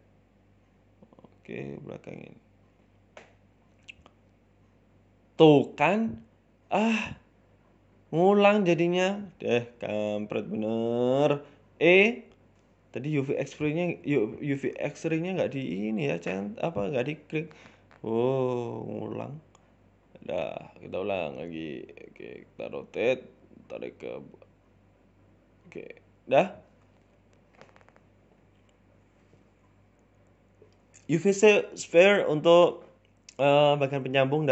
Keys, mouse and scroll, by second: 0.3 r, 1.0 g, 2.7 r, 3.8 Tab, 3.9-4.7 scroll down 5, 4.3 z, 4.8 middle click, 5.3 shift+middle click, 5.6 middle click, 6.2-7.1 ctrl+z, 8.0 ctrl+shift+z, 8.3 KP_3, 8.8 KP_1, 9.2 shift+middle click, 9.5 scroll up 2, 9.7 shift+middle click, 10.0 click, 10.8-11.3 scroll up 2, 11.3 e, 13.0 click, 13.8 r, 15.4 g, 15.8 r, 18.1 g, 19.0 r, 19.9 shift+middle click, 20.3 click, 20.8 e, 21.2 ctrl+z, 21.7 r, 22.3 f, 22.5 g, 24.3 r, 24.7 f, 24.9 g, 26.0-26.4 scroll down 3, 26.4 scroll up 2, 26.6 shift+middle click, 27.0 scroll down 2, 27.1 Tab, 27.6 Tab, 27.8 shift+a, 29.2 g, 29.8 s, 30.6 g, 31.0 s, 32.8 g, 33.9 middle click, 34.0 middle click, 34.2 scroll down 3, 34.3 Tab, 34.3 scroll up 1, 34.4 middle click.